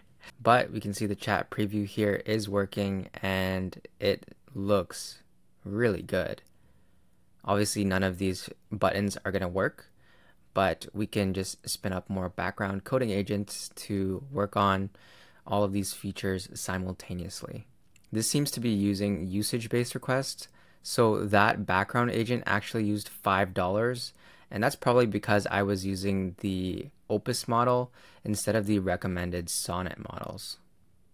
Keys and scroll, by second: 0.1 super+Tab, 0.4 super+[, 17.6 super+Tab.